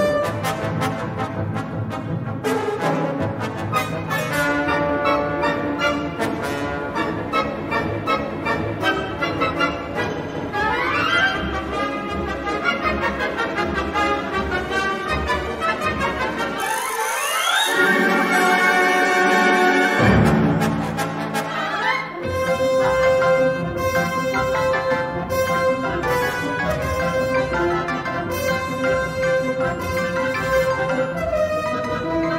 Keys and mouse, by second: 0.6 middle click, 2.3 g, 3.5 2, 4.9 1, 5.2 g, 6.3-8.0 middle drag, 9.0-11.6 middle drag, 12.3 middle click, 12.8 3, 13.2 middle click, 15.0 click, 15.6 middle click, 16.8 shift+click, 17.3 g, 18.6 middle click, 19.8 middle click, 21.4 l, 22.1 g, 23.4 middle click, 24.0 3, 26.8 click, 28.0 s, 28.6 g, 32.0 e.